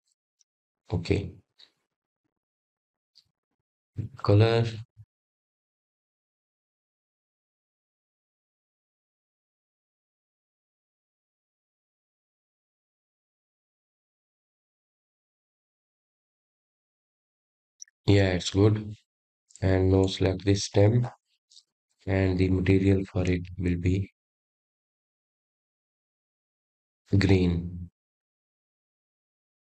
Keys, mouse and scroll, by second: 3.6-5.1 scroll up 1, 5.1-5.9 scroll up 1, 5.9 click, 7.1 click, 23.4 click, 24.4-25.8 scroll up 3, 25.8 click.